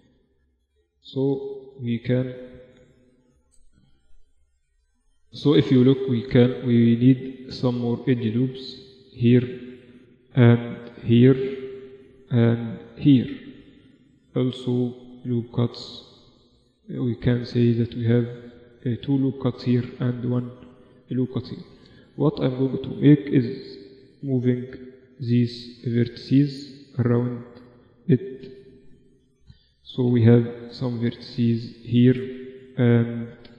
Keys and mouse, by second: 0.7 z, 1.0 z, 1.3 middle click, 3.2 z, 3.4 Tab, 4.4 z, 8.5 ctrl+r, 9.8 ctrl+r, 11.7 ctrl+r, 13.1-16.9 middle drag, 13.3 ctrl+r, 19.3 ctrl+r, 20.7-22.0 middle drag, 22.8 shift+v, 24.7 shift+v, 25.9-27.2 middle drag, 27.2-29.8 drag, 27.8-30.7 right drag, 29.8 g, 32.1-33.5 drag, 33.1 shift+v.